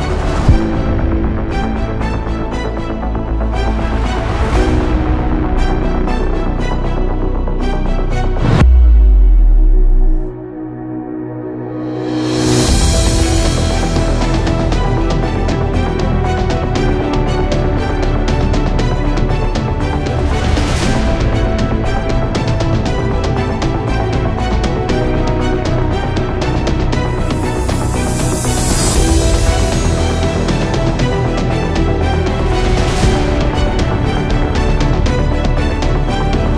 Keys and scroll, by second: 0.6 ctrl+alt+space, 2.2 ctrl+alt+space, 2.5 ctrl+alt+space, 3.3 ctrl+space, 5.1 space, 5.3 space, 17.4 Return, 20.5-21.1 typing.